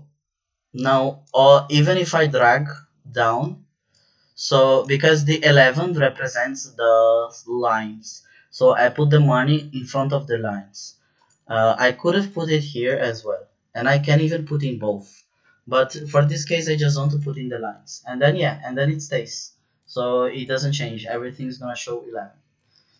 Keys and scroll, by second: 13.2 shift+4, 15.9 BackSpace, 22.7 ctrl+z.